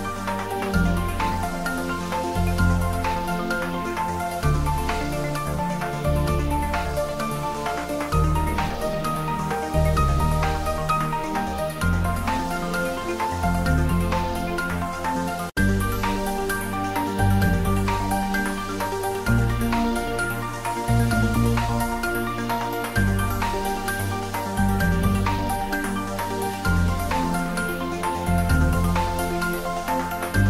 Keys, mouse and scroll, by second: 0.7 click, 1.2 Tab, 2.2 ctrl+r, 2.5 click, 3.1 Tab, 3.4 middle click, 4.2 ctrl+z, 4.8 Tab, 5.0 middle click, 5.6 Tab, 6.6 right click, 7.3 click, 7.9 ctrl+middle click, 8.5-9.7 ctrl+shift+middle drag, 9.9 middle click, 10.5 ctrl+z, 16.1-18.0 drag, 18.0 middle click, 18.0 middle click, 19.1 shift+z, 19.9 shift+click, 20.9-22.5 drag, 22.5 click, 23.0 shift+z, 23.3 ctrl+middle click, 24.0 Tab, 24.5 ctrl+3, 24.8 ctrl+middle click, 25.3 Tab, 25.5 ctrl+middle click, 26.2 click, 27.6 ctrl+b, 29.8 Down.